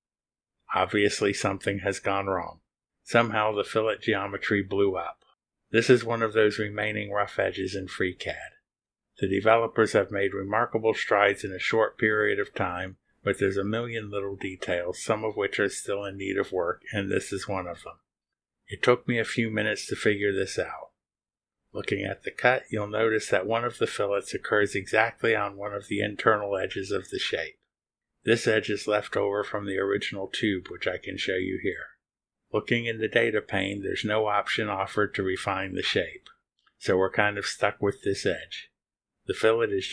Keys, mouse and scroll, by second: 4.2 click, 5.1 click, 5.3 space, 28.7 click, 30.2 click, 30.7 space, 32.7 click, 33.9 click, 34.3 space, 37.9 click.